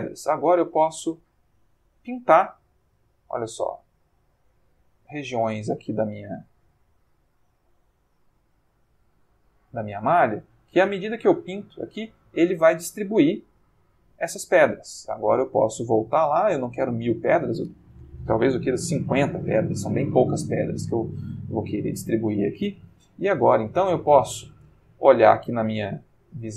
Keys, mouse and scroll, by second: 0.5 click, 2.4 click, 3.5 click, 4.5 click, 5.7 click, 6.8-8.2 ctrl+middle drag, 9.2 click, 13.4 click, 15.5 click, 17.0 click, 18.5 5, 18.6 0, 19.0 Return, 20.5 ctrl+middle click, 21.4 ctrl+shift+scroll up 2, 21.5 ctrl+shift+middle click, 24.1 click, 25.8 ctrl+middle click.